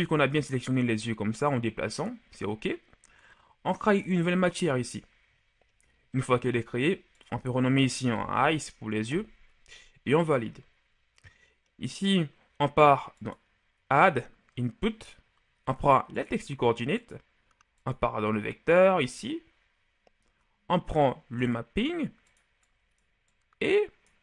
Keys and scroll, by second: 7.7-8.1 typing, 8.9 Return.